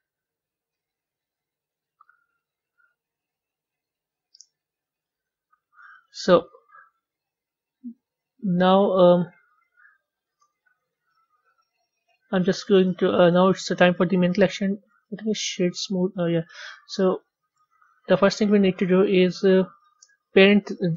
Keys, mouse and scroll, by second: 3.8 drag, 4.2-5.0 scroll down 3, 5.0-5.7 scroll down 3, 5.7 z, 7.0-8.7 scroll down 3, 10.6 click, 12.0 click, 12.7-13.6 middle drag, 13.6-14.2 scroll down 1, 14.2 click, 14.9-16.2 right drag, 16.2-20.9 middle drag.